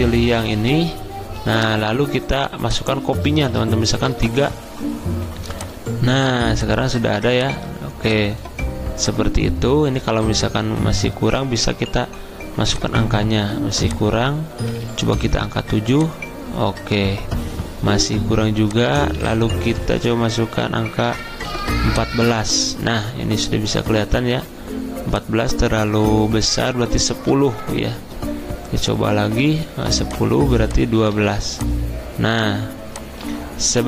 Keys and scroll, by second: 4.1 3, 12.0 4, 15.2 7, 20.8-21.9 typing, 27.3 1, 30.8-31.7 typing, 33.3-33.8 typing.